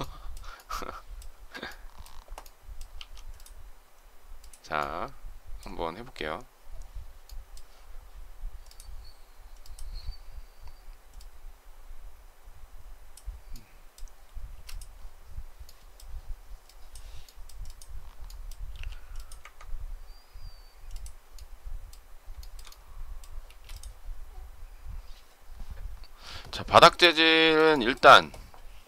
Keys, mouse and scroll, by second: 1.2 space, 2.7 m, 14.4 space, 18.5 m, 22.2 shift+middle click, 23.3 space, 26.9 shift+middle click.